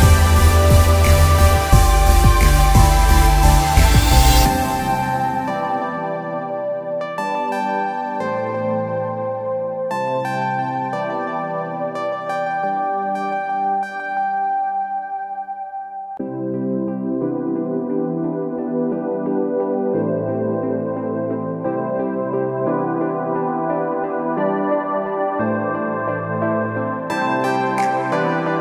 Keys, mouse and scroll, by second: 3.1 Return, 4.6 click, 5.2 Down, 26.2 Down.